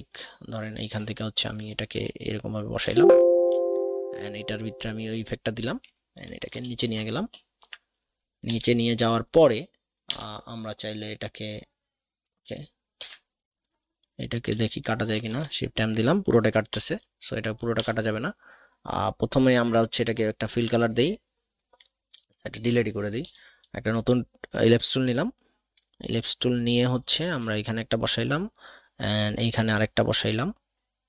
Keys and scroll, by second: 2.0 alt+shift+space, 6.5 ctrl+shift+[, 7.1 ctrl+shift+], 8.4 v, 13.0 ctrl+alt+KP_2, 15.1 shift+m, 16.7 v, 22.3 Delete, 23.2 l, 23.9 alt+shift+l, 25.8 alt+shift+space, 29.5 alt+shift+space.